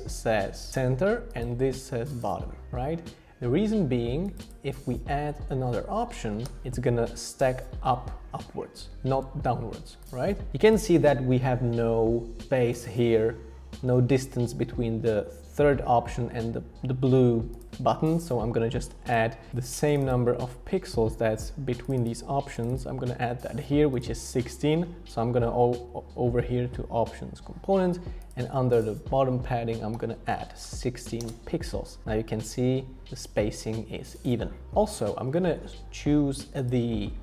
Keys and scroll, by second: 6.4 super+d, 9.5 super+z, 30.0-31.1 typing, 31.2 Return.